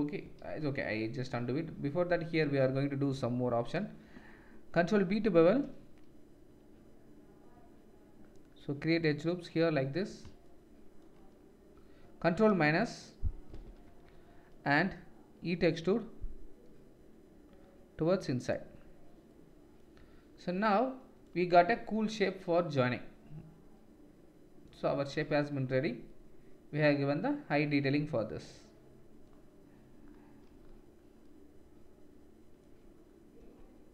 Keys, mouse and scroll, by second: 0.4 ctrl+z, 4.9 ctrl+b, 13.5 ctrl+KP_Subtract, 15.8 e, 20.1 Tab, 25.1 ctrl+s, 33.4 Tab.